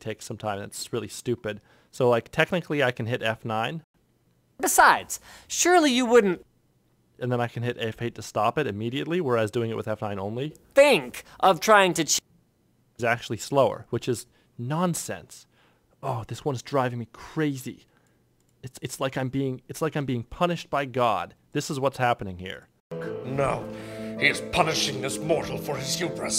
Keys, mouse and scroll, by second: 0.5 F9, 6.2 F9, 6.4 F8, 10.3 F9, 11.7 F9, 14.9 click, 15.1 F9, 16.9 F9, 18.1 F9, 18.4 click, 18.5 F9, 20.0 ctrl+F1, 20.1 F9, 21.5 F9, 21.6 F9, 22.6 F9, 25.8 alt+F9.